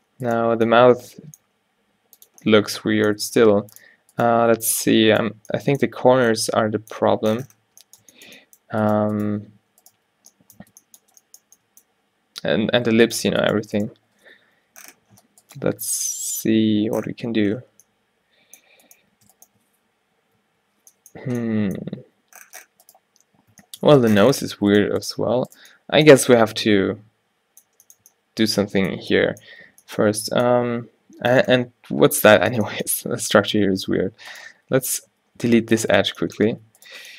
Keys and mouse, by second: 1.6 g, 3.3 g, 4.3-5.9 drag, 4.6-5.6 typing, 6.0 Tab, 7.7 Tab, 9.4 q, 9.6 q, 10.1 q, 10.7 Tab, 13.0 Tab, 14.1 o, 14.7 g, 20.4-22.1 drag, 20.4 o, 22.1 g, 25.3 g, 26.3 a, 30.7 a, 31.2 a, 33.1 a, 33.7 a, 35.1 x, 36.2 a, 36.6 a.